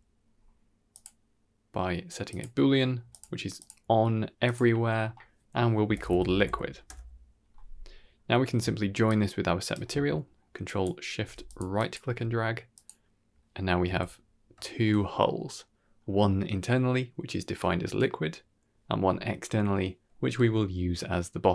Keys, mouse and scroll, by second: 0.2-0.6 scroll up 5, 0.8-2.3 drag, 3.0 click, 3.5 click, 4.3-6.8 drag, 7.7-8.2 scroll down 7, 8.2 middle click, 8.9-9.6 ctrl+shift+right drag, 10.1 middle click, 10.5 drag, 11.1 g, 11.7 drag, 12.0 g, 13.0 middle click, 13.7 z, 14.1 scroll up 1, 14.5 shift+middle drag.